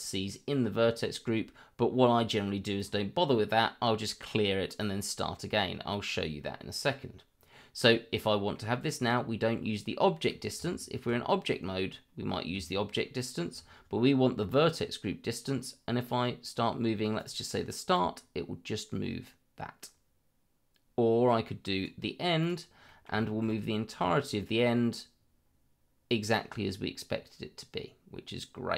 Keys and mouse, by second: 2.8 click, 5.5 middle click, 8.1 middle click, 17.2 click, 17.9-21.9 drag, 22.4 click, 22.8 middle drag, 23.2 shift+middle drag, 24.6-28.7 drag.